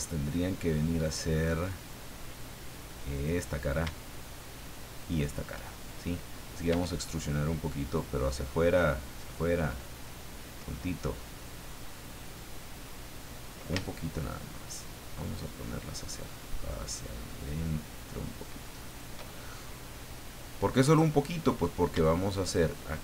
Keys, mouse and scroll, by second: 1.6 click, 3.1 right click, 5.0 shift+right click, 6.7 e, 18.9 shift+click, 19.4-21.0 shift+middle drag, 22.4 shift+right click, 22.9 shift+right click.